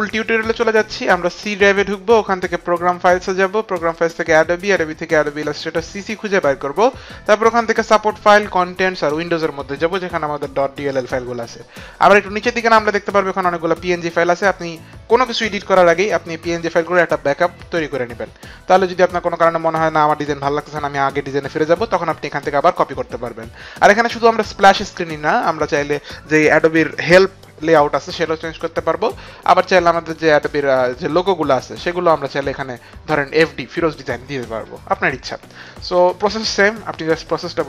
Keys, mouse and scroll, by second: 1.4 click, 3.1 click, 4.1 click, 8.3 click, 8.9 click, 10.3 click, 25.7 click, 31.1 click, 31.7 click.